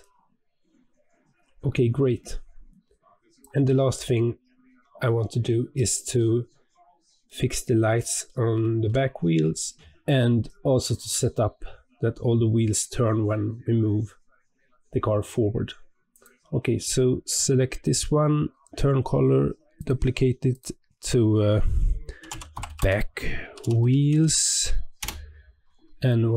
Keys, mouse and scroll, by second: 3.6-4.0 scroll down 2, 4.0-10.8 middle drag, 16.0 click, 19.7-23.6 drag, 23.9 e, 26.2-26.3 scroll down 12.